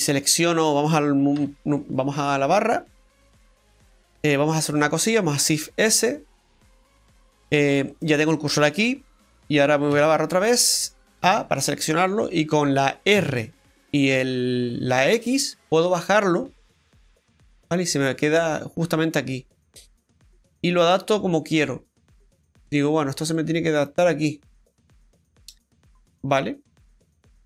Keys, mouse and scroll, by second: 2.5-2.8 scroll up 2, 3.0 middle click, 3.8 right click, 4.0 alt+shift+right click, 5.7 shift+s, 6.8 scroll down 1, 7.7 scroll down 1, 7.9 middle click, 9.9 KP_Divide, 11.2 a.